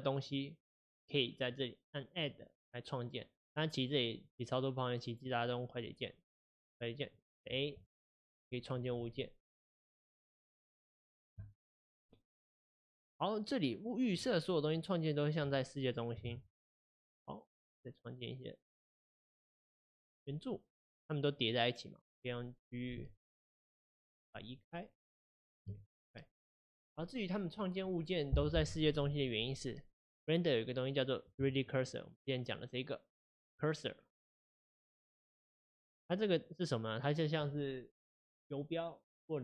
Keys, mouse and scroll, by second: 2.2-7.2 drag, 7.9 shift+a, 14.3-16.2 middle drag, 16.2 shift+a, 22.0 click, 22.9 g, 25.0 click, 25.5 g.